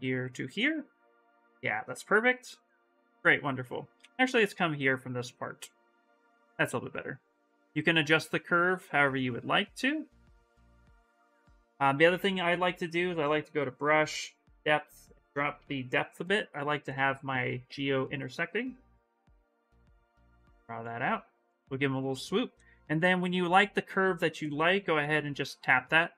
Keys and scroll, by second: 3.7 ctrl+z, 9.0 ctrl+z, 11.4 ctrl+z.